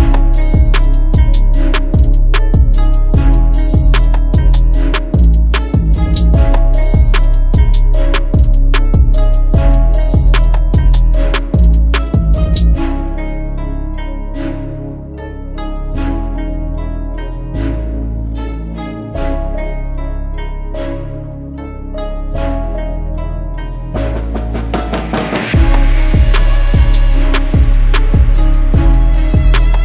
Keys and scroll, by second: 2.4 ctrl+g, 3.6 F4, 7.2 shift+F2, 7.9 shift+Page_Up, 8.6 F3, 17.0 F3, 29.0 shift+F2, 29.7 ctrl+z.